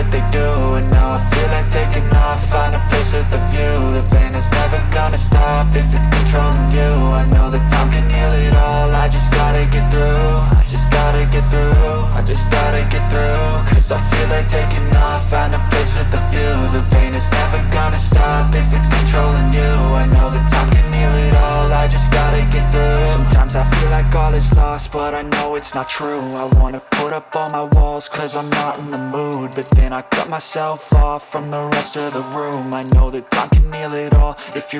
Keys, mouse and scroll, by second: 4.5 typing, 13.8 double click, 13.9 typing, 15.2 Return.